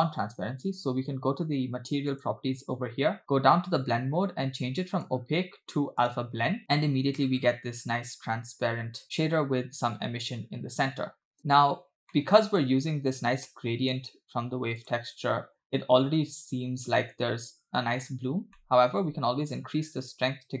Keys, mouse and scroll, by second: 2.3 click, 3.2-4.5 scroll down 3, 5.0-6.4 drag, 6.6 space, 11.1 space, 12.2 middle click, 13.5 middle click, 14.8 click, 15.7-16.5 scroll up 4, 18.6 middle click, 19.6-20.6 drag.